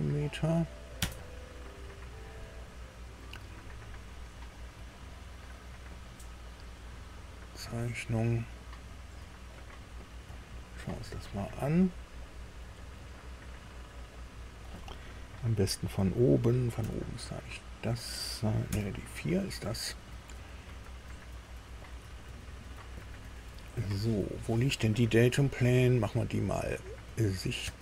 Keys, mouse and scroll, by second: 0.9 KP_Enter, 4.6 click, 8.7 click, 11.2-14.7 drag, 16.7 KP_1, 18.6 KP_4, 20.9-21.2 scroll up 2, 22.0 scroll down 2, 23.9 middle click, 27.0 click, 27.6 space.